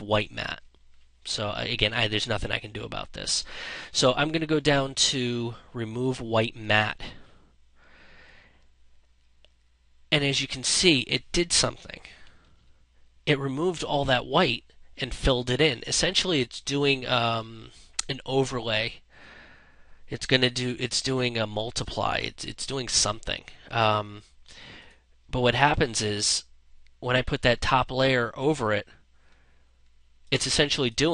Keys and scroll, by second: 11.8 ctrl+z.